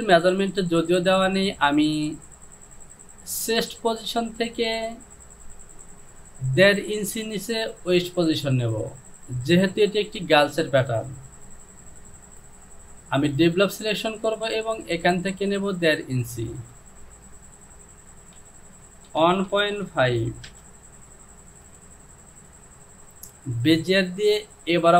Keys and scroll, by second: 16.7 space, 18.1 Down, 19.1 KP_1, 19.6 KP_Decimal, 19.9 KP_5, 20.5 Return.